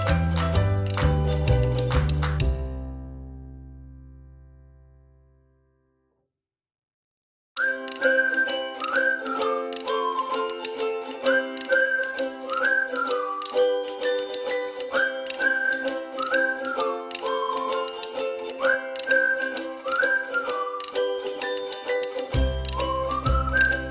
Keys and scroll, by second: 2.7 ctrl+z, 12.1 space, 15.7 ctrl+z.